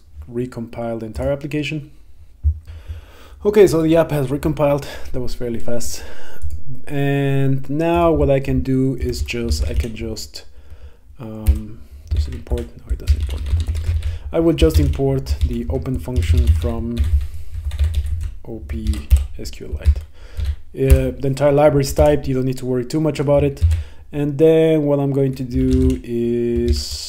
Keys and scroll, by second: 9.1 Return, 11.6 Return, 12.2 super+BackSpace, 15.5 Right, 19.0 Down, 19.2 Return, 20.0 Right, 21.0 Return, 23.7 shift+super+v, 26.8 Down.